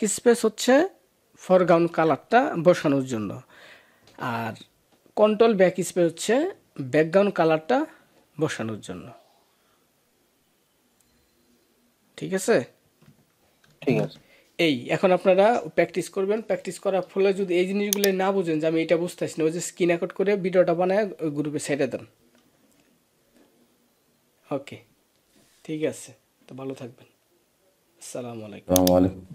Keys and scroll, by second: 13.5 ctrl+s.